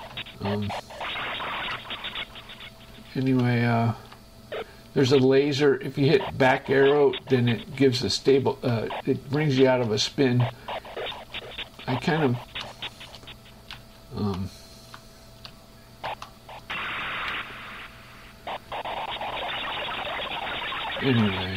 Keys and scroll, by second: 0.1 Right, 0.5 space, 3.1 Right, 3.6 Up, 4.3 Left, 5.3 Up, 7.3 space, 8.7 Right, 9.3 Left, 9.8 space, 12.1 Left, 12.8 space, 13.3 Up, 14.1 Right, 14.6 Up, 15.2 Left, 16.3 Right, 17.1 space, 19.0 Right, 19.5 space.